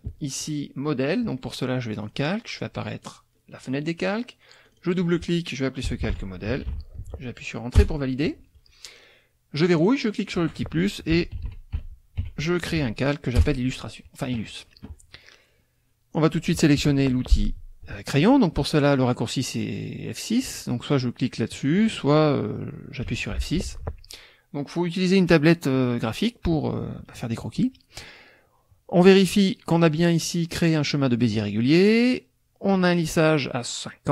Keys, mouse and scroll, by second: 2.0 click, 3.0 click, 4.6 click, 5.6-7.1 typing, 7.8 Return, 9.8 click, 10.3 click, 10.9-12.7 typing, 13.4 Return, 21.5 click, 23.1 F6, 23.9 click, 32.7-34.0 drag.